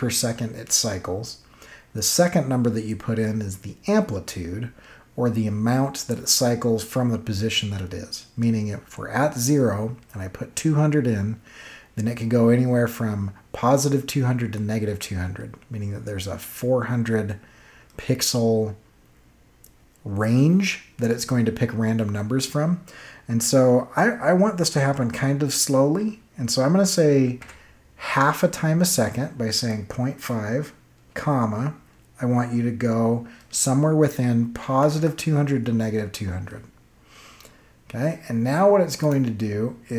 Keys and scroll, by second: 27.3 5, 31.0 ,, 34.3-35.3 typing.